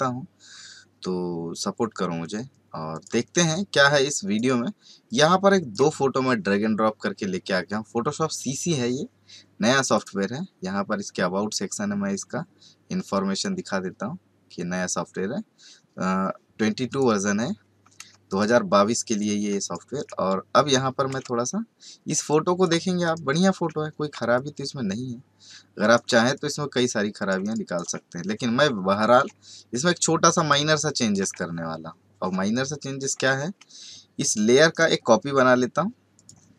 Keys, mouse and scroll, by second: 2.9 click, 5.0 click, 9.8 click, 13.3 click, 16.9 click, 18.1 space, 18.2 right click, 19.5-33.0 typing, 19.6 right click, 21.2 ctrl+space, 21.4 ctrl+click, 21.7-22.6 ctrl+space, 23.2 click, 24.1 ctrl+space, 24.3 ctrl+click, 24.6 ctrl+space, 24.7 ctrl+space, 25.5 ctrl+space, 25.6-26.1 ctrl+space, 26.3 click, 27.4 right click, 29.5 ctrl+click, 32.5 click, 34.7 right click, 36.1 click.